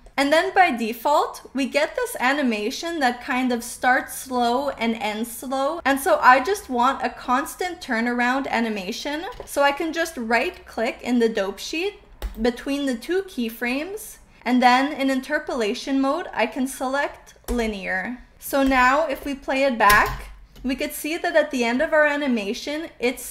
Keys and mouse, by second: 0.2-9.1 drag, 12.1-17.6 drag, 18.7 click, 19.9 space.